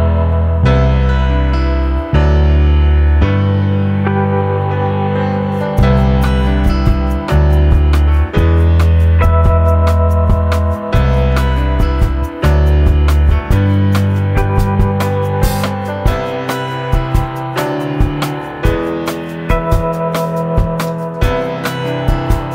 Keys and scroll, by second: 2.3-3.9 typing, 10.7 Down, 12.8 ctrl+a, 13.3-18.8 typing, 19.9 ctrl+a, 22.1 ctrl+a, 22.4 2.